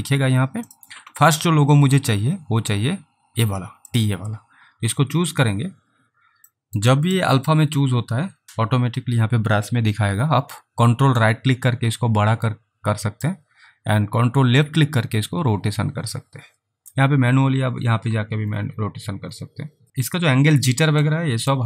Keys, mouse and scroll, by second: 0.7 click, 3.9 click, 6.6 alt+middle click, 7.1 alt+right click, 7.6-9.4 scroll up 3, 11.3 ctrl+right click, 14.7 ctrl+click, 17.3-19.9 scroll up 3, 21.1 click.